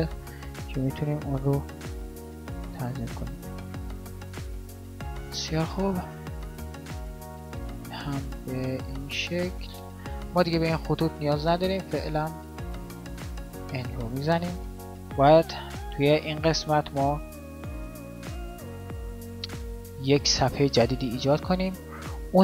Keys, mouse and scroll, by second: 7.4-13.1 middle drag, 13.1 n.